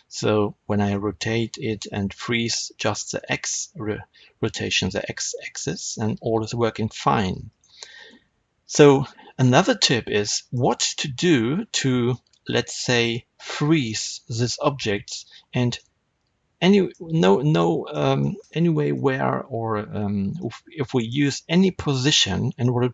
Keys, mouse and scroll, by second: 1.6 r, 7.5 right click, 7.8-8.6 scroll up 1, 8.6-22.9 middle drag, 22.4 r.